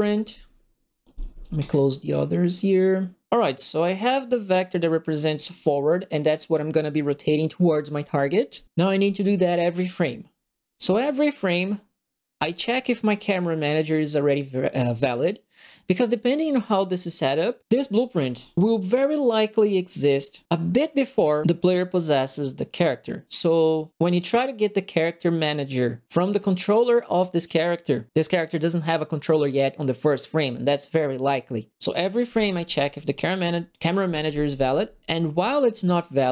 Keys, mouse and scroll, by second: 1.5 middle click, 8.8 right click, 9.7 right click, 10.1 middle click, 10.6 right click, 11.5 middle click, 12.3 right click, 13.0 click.